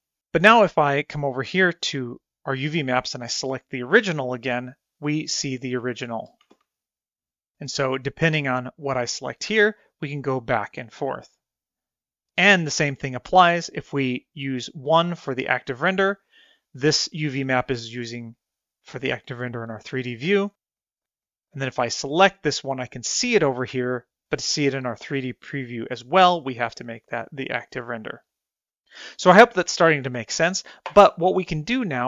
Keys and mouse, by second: 4.5 click, 7.0 a, 7.2 a, 9.2 click, 10.2 click, 12.0 click, 15.2 click, 28.2 click.